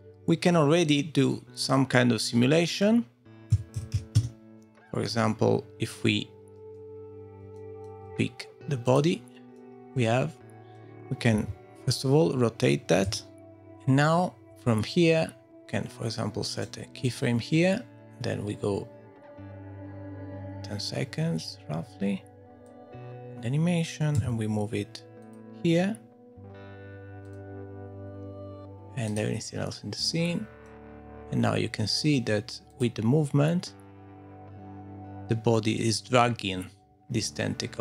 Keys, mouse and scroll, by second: 0.9 click, 2.9 click, 3.9 click, 4.1 g, 6.7-7.1 scroll down 2, 7.1-8.0 scroll up 4, 7.5 shift+middle click, 8.1-8.8 scroll up 1, 8.8 click, 8.8 scroll up 1, 9.5 middle click, 11.3 r, 13.4 shift+middle click, 15.5 click, 16.5 right click, 23.2 scroll down 3, 24.1 g, 27.2 click, 28.1-29.1 scroll up 1, 29.1 click, 30.0 middle click, 32.7 middle click.